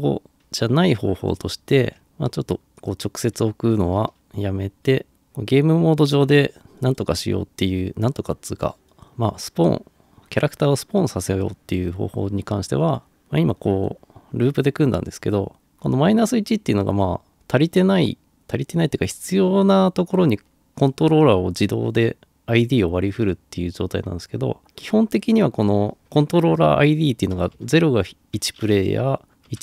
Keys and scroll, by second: 0.8 Delete, 2.4 Delete, 27.4 0, 27.6 Return, 29.3 1, 29.5 Return.